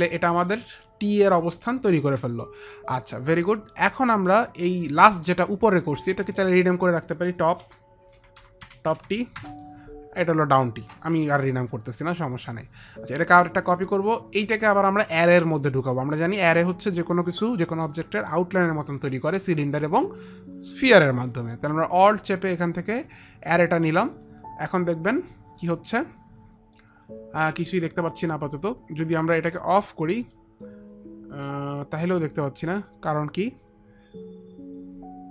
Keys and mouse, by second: 0.1 alt+click, 0.1 middle click, 3.4 alt+click, 5.6 click, 6.9 click, 8.2 t, 8.7 o, 8.8 p, 12.8 click, 22.9 alt+click, 28.3 alt+click, 30.6 alt+click, 33.8 alt+click, 34.8 click.